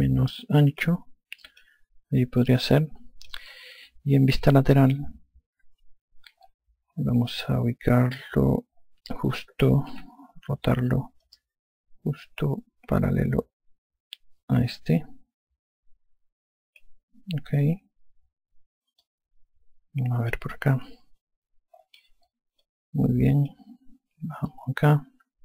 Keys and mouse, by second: 3.3 alt+click, 5.6 F3, 10.8 r, 12.1 click, 18.5 e, 19.9 click, 21.4 F1, 23.5 alt+click, 25.3 click.